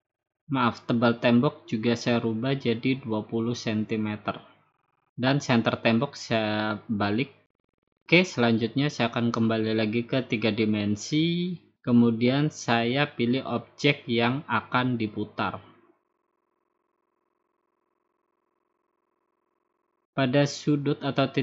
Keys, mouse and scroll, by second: 0.9-2.0 drag, 2.5-3.5 drag, 3.4-4.8 typing, 6.8-8.0 drag, 10.6-11.8 drag, 12.4 click, 13.0 click, 13.9 middle click, 15.3 click, 17.2 click, 18.4-19.4 drag, 19.8-20.9 drag.